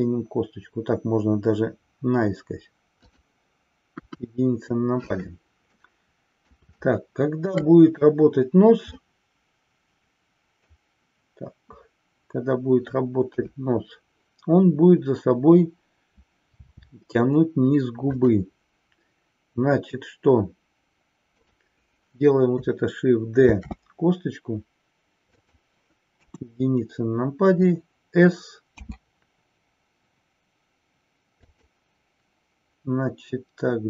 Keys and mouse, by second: 3.1 click, 3.9 KP_1, 5.8 middle click, 6.8-7.7 shift+middle drag, 8.9-10.9 middle drag, 13.3 KP_3, 18.2 click, 21.2 click, 23.6 shift+d, 25.3 click, 26.3 KP_1, 28.7 s, 31.6 click.